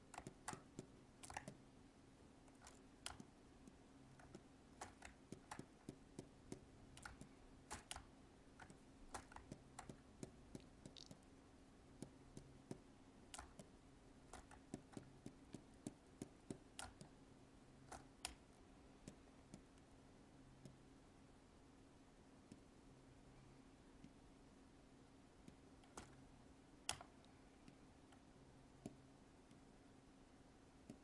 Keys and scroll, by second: 1.3 alt+space, 13.4 alt+space, 16.7 alt+space.